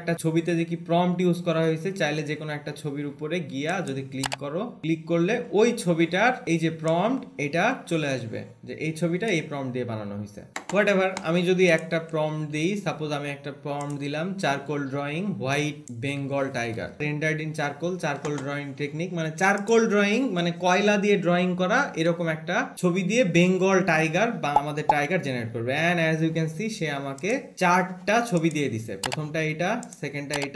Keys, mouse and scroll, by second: 4.1 click, 7.3 click, 12.1 click, 12.7 ctrl+v, 14.2 click, 16.2 click, 20.0 click.